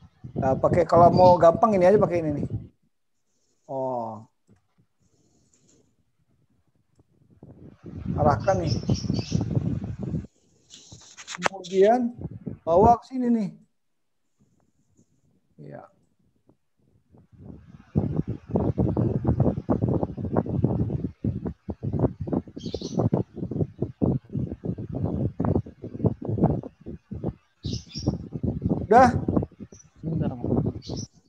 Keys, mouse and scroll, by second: 1.1 click, 2.8 click, 6.1 click, 8.4 click, 12.1 click, 14.0 click, 16.1 click, 18.4 click, 21.3 click, 23.4 click, 23.9 click, 25.8 click, 27.2 click, 28.4 click, 29.9 click.